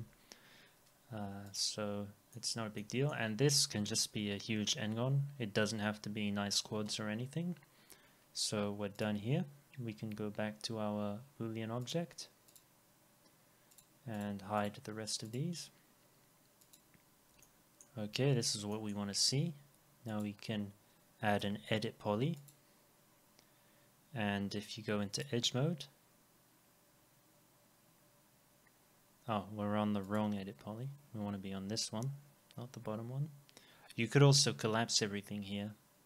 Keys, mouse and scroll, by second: 2.1-2.5 scroll down 2, 2.3 middle click, 2.8 alt+middle click, 14.2 double click, 17.4 alt+middle click, 21.4 e, 22.5 double click.